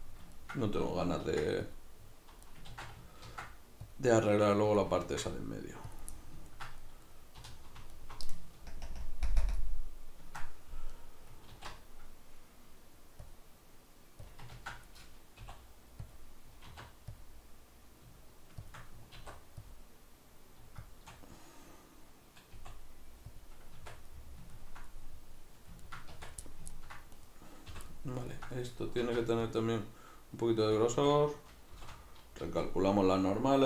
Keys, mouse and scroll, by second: 0.1-2.6 middle drag, 1.3 ctrl+r, 2.6 right click, 2.7 ctrl+z, 3.3 ctrl+r, 4.8 click, 5.1 ctrl+r, 6.0 click, 6.1-7.9 middle drag, 7.4 3, 7.9 alt+right click, 8.7 ctrl+KP_Add, 9.3 ctrl+KP_Subtract, 10.9-14.4 middle drag, 11.5 alt+e, 14.4 click, 14.5 ctrl+z, 16.1 click, 16.7 alt+e, 18.7 shift+click, 19.2 alt+e, 20.9 shift+click, 22.6 i, 23.4 click, 23.7 Tab, 24.1-27.1 middle drag, 26.1 Tab, 27.1 right click, 27.7 l, 27.9-30.8 middle drag, 29.0 alt+e, 30.8 click, 30.9 a, 31.8 shift+n, 32.4 z, 33.4-33.6 middle drag.